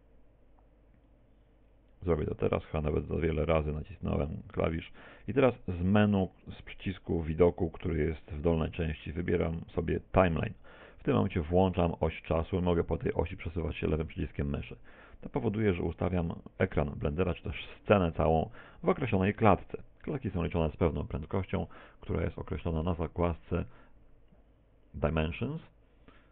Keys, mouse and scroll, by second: 2.1 click, 4.8 click, 4.9 click, 9.1 click.